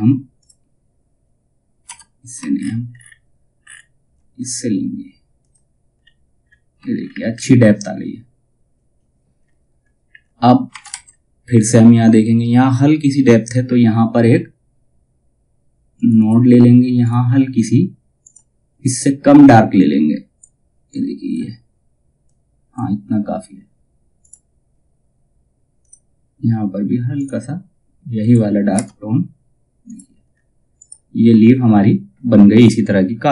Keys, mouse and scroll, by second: 3.2-3.6 alt+scroll down 1, 3.9 click, 5.5-6.0 scroll down 1, 6.4 alt+scroll down 1, 9.0-9.3 scroll down 1, 13.0-14.7 scroll up 1, 15.5 click, 17.8-23.7 drag, 28.3 space, 29.4 click, 29.8-30.3 scroll down 1, 30.3 click.